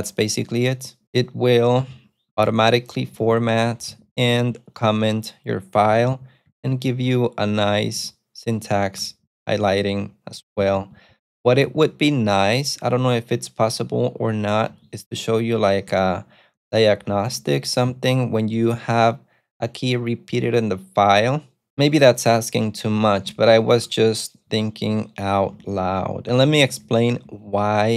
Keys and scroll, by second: 2.5 ctrl+super+F2, 3.0-11.2 typing, 11.6 ctrl+u, 11.8 ctrl+u, 11.9 ctrl+u, 12.9 ctrl+u, 13.7 ctrl+u, 14.8-18.0 typing, 23.7 ctrl+u, 24.6 ctrl+j, 25.6 j, 26.2 j, 26.8 j.